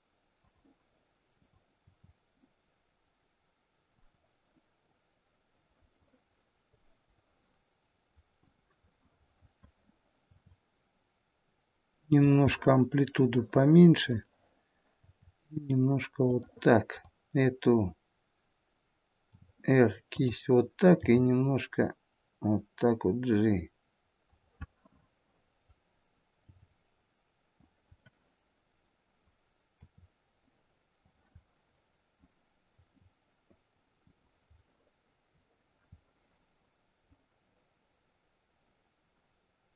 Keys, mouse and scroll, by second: 1.3 click, 1.9 r, 5.8 middle click, 7.2 middle click, 8.4 click, 9.1 middle click, 10.3 r, 12.5 middle click, 15.0 r, 16.9 click, 19.3 r, 21.1 g, 24.6 middle click, 26.6 g, 28.0 middle click, 29.7 r, 31.4 middle click, 32.8 r, 35.6 middle click, 35.9 middle click, 38.7 scroll down 1, 39.4 middle click.